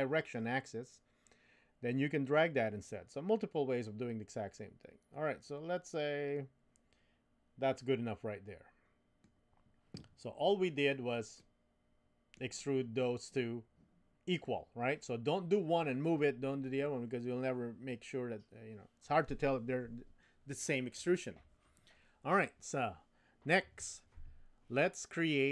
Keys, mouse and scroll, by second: 11.4-12.4 middle drag.